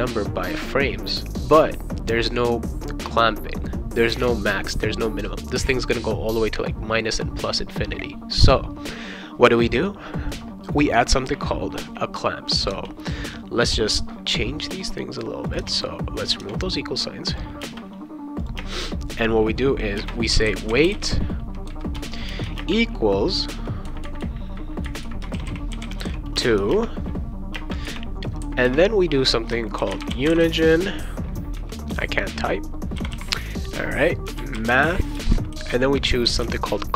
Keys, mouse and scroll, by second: 10.3 click, 11.8 space, 12.7 BackSpace, 15.5 click, 16.2 click, 16.4 BackSpace, 17.3 click, 17.6 space, 18.4 click, 18.5 space, 19.1 click, 20.0-22.6 typing, 21.9 Return, 25.1-27.5 typing, 29.5-31.0 typing, 31.9 Return, 32.9-36.9 typing.